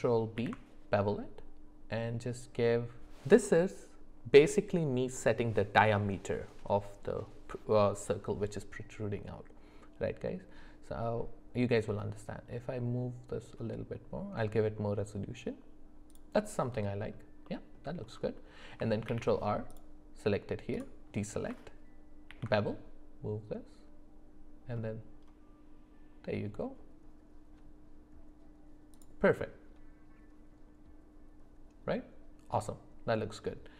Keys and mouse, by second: 0.4 ctrl+b, 16.6 middle click, 17.4 middle click, 19.1 ctrl+r, 22.3 ctrl+b, 29.4-33.2 middle drag.